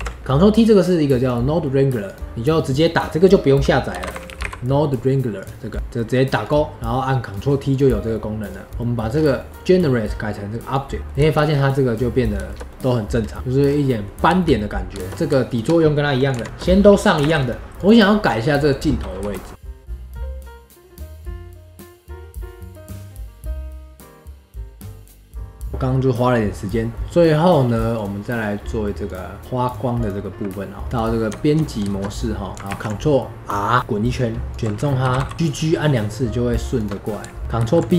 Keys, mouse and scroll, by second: 0.2 middle click, 0.8-2.3 drag, 8.7 middle click, 9.1 scroll up 2, 9.3-10.7 middle drag, 10.7 drag, 11.0-11.5 middle drag, 11.5-12.4 scroll up 3, 12.4-13.2 shift+middle drag, 13.2-13.7 scroll down 4, 13.3 middle click, 13.8-15.1 middle drag, 15.4 shift+click, 16.3 ctrl+l, 17.2 ctrl+l, 17.7-19.2 drag, 19.2 KP_1, 19.5 KP_3, 19.5 scroll down 3, 19.6 n, 19.6 ctrl+alt+KP_0, 19.8 click, 19.9 middle click, 19.9 click, 20.1 space, 20.1 scroll down 1, 20.1 middle click, 20.2 click, 20.3 ctrl+z, 20.4 middle click, 20.5 click, 20.5 middle click, 20.6 click, 21.0 middle click, 21.3 scroll up 10, 21.3 middle click, 21.4 click, 21.6-22.1 scroll down 8, 21.7-25.7 typing, 21.8 middle click, 22.1 click, 22.2 click, 22.2 middle drag, 22.4 ctrl+alt+KP_0, 23.0 click, 23.0 scroll down 3, 23.0 scroll up 1, 23.2 shift+middle click, 23.5 scroll down 1, 23.6 scroll up 5, 23.7 scroll down 4, 23.7 click, 23.9 shift+middle click, 23.9-24.5 scroll up 3, 24.0 shift+middle click, 24.5 shift+middle click, 24.6 scroll down 5, 24.7 middle click, 24.9 click, 25.2-25.8 scroll up 2, 25.3 click, 25.6 middle click, 27.0-28.0 drag, 30.8 Tab, 30.9 click, 31.3 Tab, 31.8 shift+middle click, 32.7 ctrl+r, 34.5 alt+click, 35.0 g, 37.4 alt+shift+click, 37.5 ctrl+b.